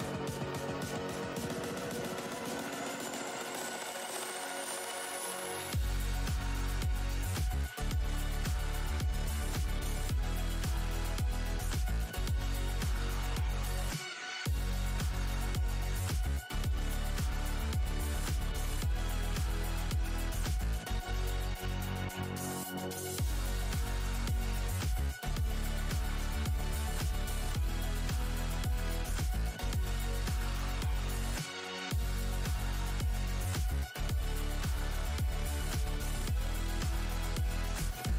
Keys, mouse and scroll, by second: 2.8 shift+space, 2.9 shift+s, 3.6 alt+click, 4.0-4.4 scroll down 3, 4.2 alt+click, 4.4-5.0 alt+scroll, 4.4 w, 5.4 f, 5.8-6.1 alt+scroll down 1, 6.8 r, 8.2 ctrl+click, 10.8 w, 11.4 scroll down 1, 12.4 alt+click, 16.1-16.5 scroll down 1, 16.1 z, 17.2 right click, 19.6 click, 19.9 e, 20.8 click, 25.2 alt+click, 27.2-29.0 typing, 29.0 Return, 30.6 click, 33.3 ctrl+space, 34.5 scroll down 1, 34.5 space, 36.2-36.8 scroll down 1, 36.2 w, 36.8 scroll down 1, 36.9 click, 38.0 z.